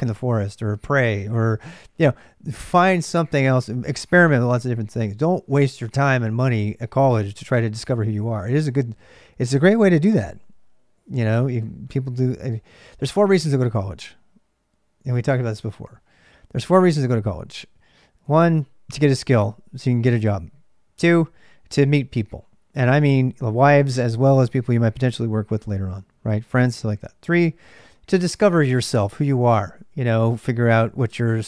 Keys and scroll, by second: 0.0-31.4 typing.